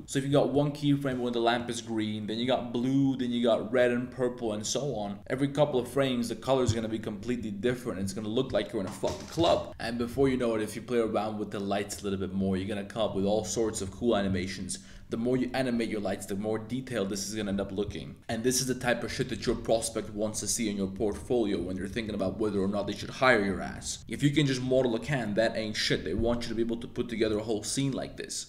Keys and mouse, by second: 0.6 click, 1.6-5.2 drag, 5.4 space, 9.7 space, 11.9 space, 18.1 space, 18.2 space, 24.0 space.